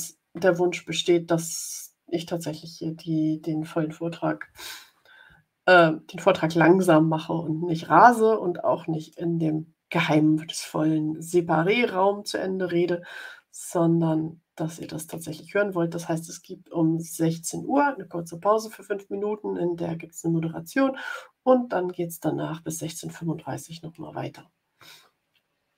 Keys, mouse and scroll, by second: 5.7-9.2 drag.